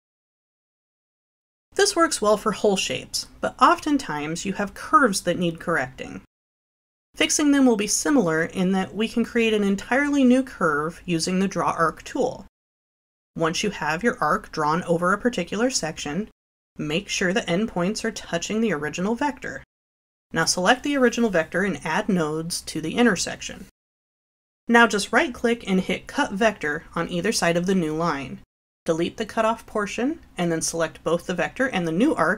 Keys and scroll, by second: 3.2 Delete, 28.8 Delete.